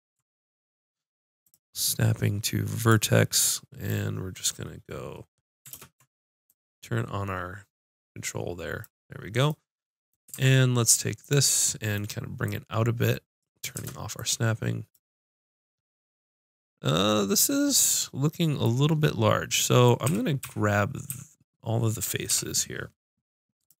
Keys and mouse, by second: 5.7 ctrl+space, 10.3 ctrl+Tab, 11.2-13.5 drag, 13.8 shift+Tab, 18.9 middle click, 20.1 a, 20.4 a, 21.1 a, 22.3 l.